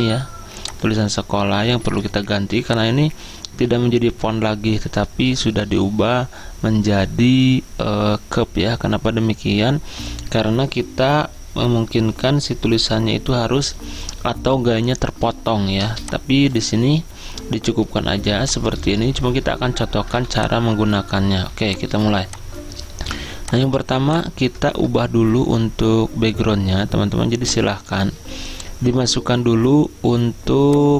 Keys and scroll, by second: 1.6-2.5 typing, 24.9-25.6 typing.